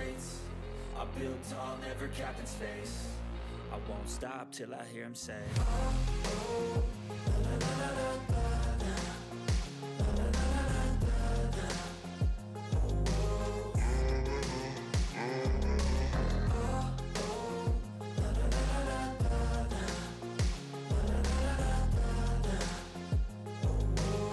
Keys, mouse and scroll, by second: 2.5 click, 3.4 6, 3.5 ctrl+s, 4.6 click, 9.4 click, 11.1-13.1 typing, 14.4-16.1 typing, 16.7 click, 17.7-23.1 typing.